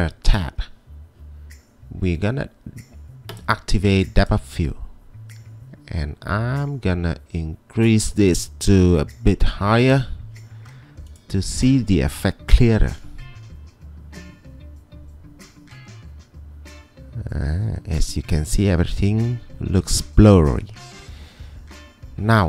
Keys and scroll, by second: 9.2-10.0 typing, 11.6 typing.